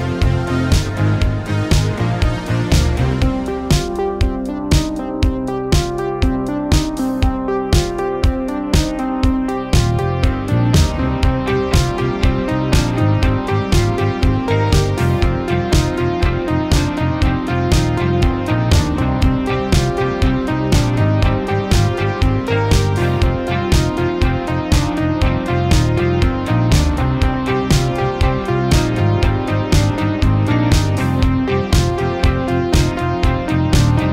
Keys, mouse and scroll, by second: 4.3 click, 6.2-7.0 typing, 7.4 click, 13.2-17.4 typing, 20.0 click, 20.6 1, 23.5-26.5 drag, 24.4 typing, 28.6 typing, 29.3-31.5 drag.